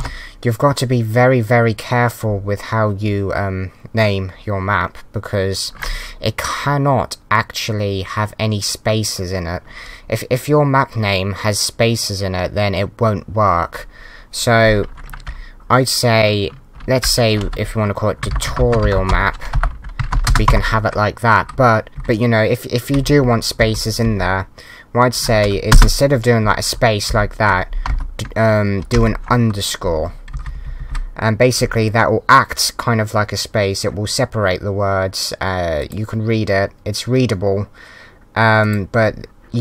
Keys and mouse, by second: 21.9 Right, 23.1 Left, 25.7 space, 26.4 Right, 27.9 Left, 27.9 BackSpace.